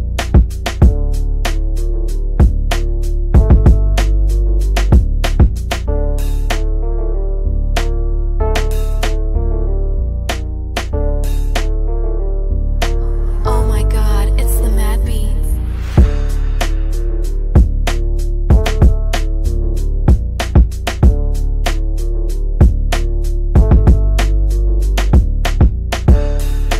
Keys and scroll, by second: 8.2 Delete, 13.8 g.